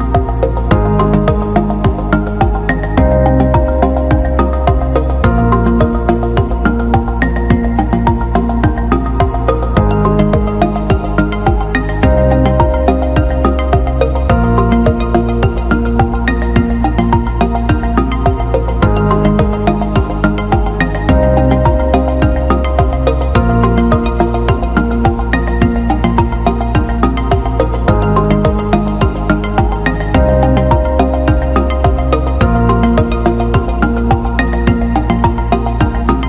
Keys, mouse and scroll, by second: 0.0 click, 0.7-2.0 drag, 3.8 click, 5.5 alt+shift+middle click, 5.9 click, 7.0-10.0 drag, 11.7 Tab, 12.9 ctrl+alt+middle click, 15.1 alt+middle click, 17.2 alt+shift+middle click, 18.2 alt+middle click, 18.9-20.5 drag, 21.2 click, 22.2 click, 23.1 click, 24.4 click, 25.6-27.7 drag, 29.0 alt+middle click, 29.6 click, 30.8 click, 31.6 alt+shift+middle click, 32.1 click, 32.4 alt+shift+middle click, 33.7 alt+shift+middle drag, 34.4-35.6 alt+middle drag.